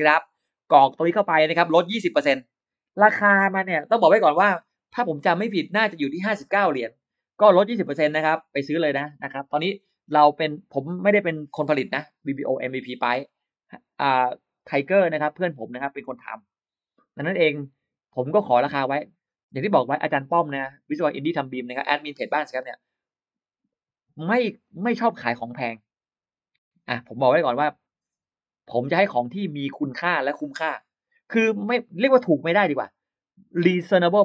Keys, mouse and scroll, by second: 1.1 click, 1.7-2.7 shift+drag.